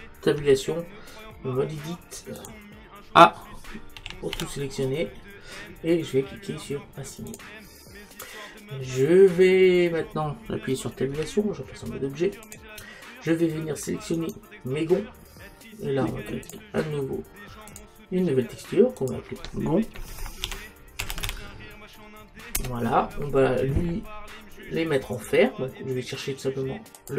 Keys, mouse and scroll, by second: 0.4 Tab, 4.0 a, 4.4 a, 7.3 click, 11.2 Tab, 14.2-16.5 right drag, 16.5-20.8 drag, 25.2 click.